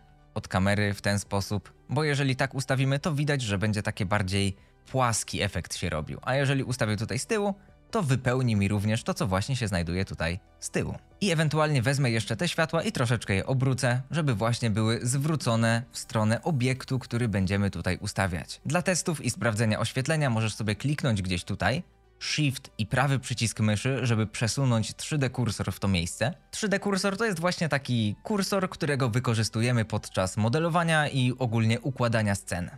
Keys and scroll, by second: 0.0 g, 0.2 y, 0.8 x, 6.9 x, 11.2 r, 12.5 r, 12.9 z, 16.2 r, 16.6 z.